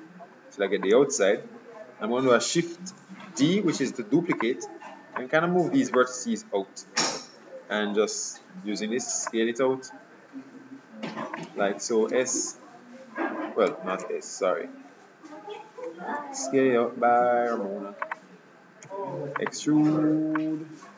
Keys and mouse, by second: 3.3 shift+d, 5.3-6.8 drag, 6.7 KP_3, 9.4-11.1 drag, 12.2 e, 15.4 ctrl+z, 16.2 s, 19.0 e, 20.5-20.9 drag.